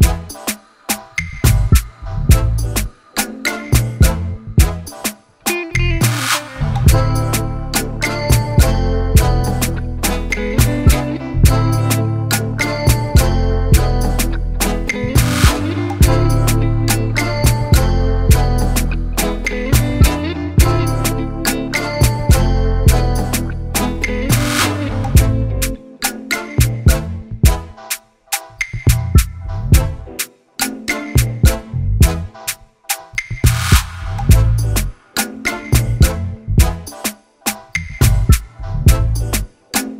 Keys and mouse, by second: 0.0-1.0 typing, 1.7 click, 3.0 click, 3.7 ctrl+t, 5.1-6.4 drag, 6.8 click, 8.5 click, 10.7-14.4 drag, 15.7-17.0 drag, 17.4-18.6 drag, 19.2 Return, 20.1 ctrl+j, 20.8 ctrl+t, 21.5 shift+Down, 22.4 Return, 24.0 click, 24.7 click, 25.0 click, 25.8-31.7 typing, 32.9 click, 35.8 click, 36.6 click, 38.1 click, 38.4-39.7 typing.